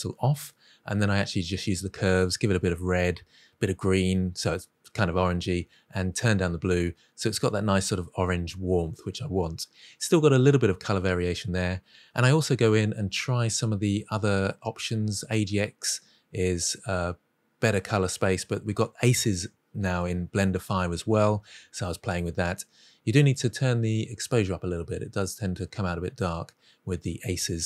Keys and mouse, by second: 0.6-1.3 drag, 1.4 click, 2.5-4.3 drag, 4.4 click, 5.2 click, 5.8-6.4 middle drag, 10.0-11.0 drag, 11.3-11.9 drag, 12.2 drag, 12.9-13.5 drag, 13.9-14.6 middle drag, 14.8 middle drag, 15.4 click, 15.7 click, 16.4 middle click, 16.7-18.2 drag, 18.6-20.9 drag, 21.1 click, 21.6 middle click, 22.0 middle click, 22.2 click, 23.6 click, 24.1 click, 24.5-25.0 drag, 25.4 click, 25.7 click, 25.9 click, 26.2 middle click, 26.5-26.8 middle drag.